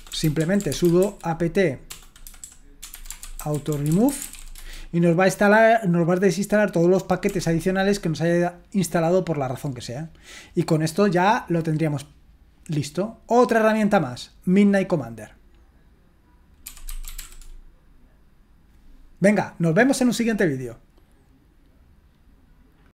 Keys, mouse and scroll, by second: 0.0-4.8 typing, 7.3 typing, 7.4 Return, 16.4-17.7 typing, 22.8 click.